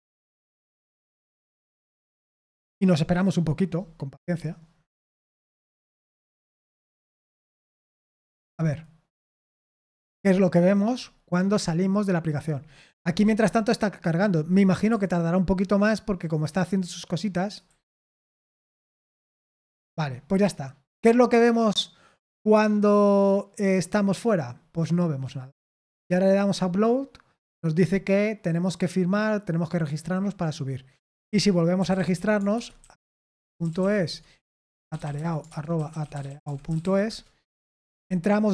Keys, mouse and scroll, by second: 14.9 super+7, 17.5 Delete, 17.8 Delete, 18.1 Delete, 19.1 super+8, 21.0-22.5 scroll up 1, 22.5-22.8 scroll up 1, 26.2 click, 30.9-37.6 typing, 34.0 Tab.